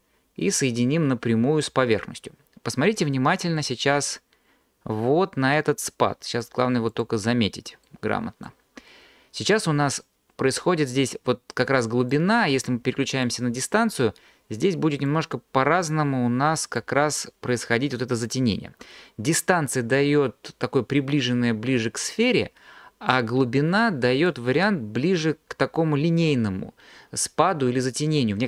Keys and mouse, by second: 0.5 drag, 6.9 click, 12.1 click, 15.2 click, 23.1 click.